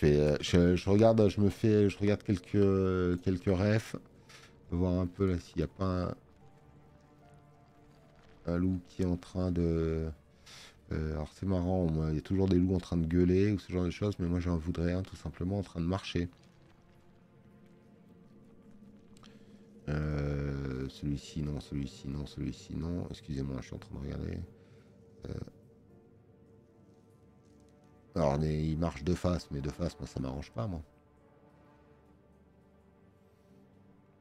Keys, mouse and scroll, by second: 6.7 click, 30.9 scroll down 2, 31.5 scroll down 2, 31.9-32.3 scroll up 2.